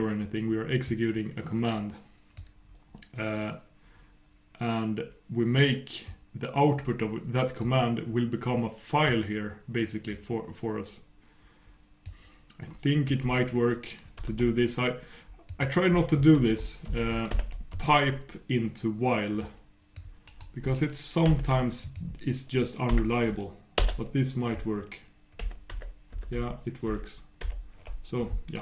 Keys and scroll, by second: 21.8 super+', 25.4 super+\, 26.1 super+', 26.8 super+..